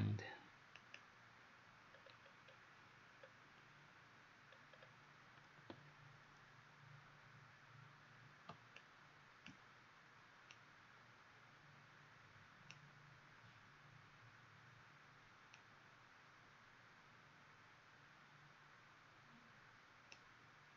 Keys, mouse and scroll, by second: 0.8 click, 2.0-2.6 scroll down 4, 3.3-4.6 scroll down 1, 4.6-7.1 scroll up 2, 7.7 scroll up 1, 8.8 click, 10.5 right click.